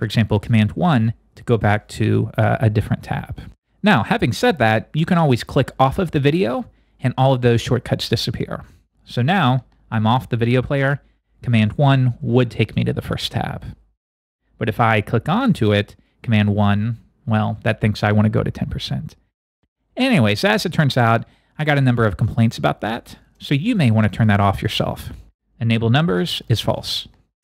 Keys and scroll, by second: 16.6 super+i.